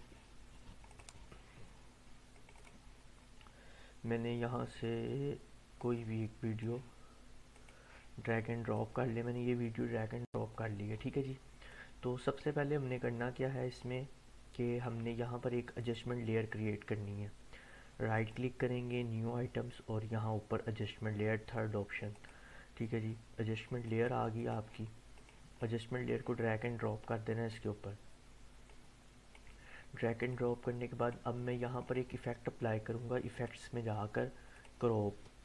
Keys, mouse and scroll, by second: 0.9 click, 5.8-6.6 drag, 11.7-12.6 drag, 15.8 right click, 18.1 right click, 22.2-27.7 drag.